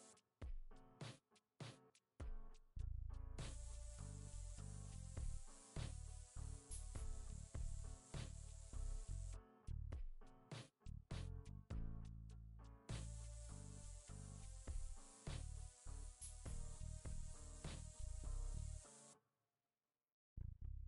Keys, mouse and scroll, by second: 3.4 ctrl+x.